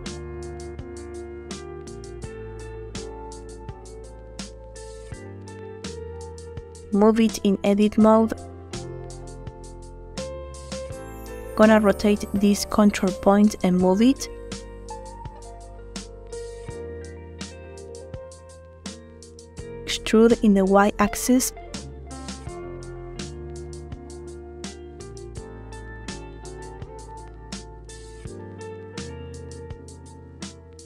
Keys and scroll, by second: 3.8 0, 4.0 Return, 12.1 r, 16.0 g, 21.0 e, 21.7 y.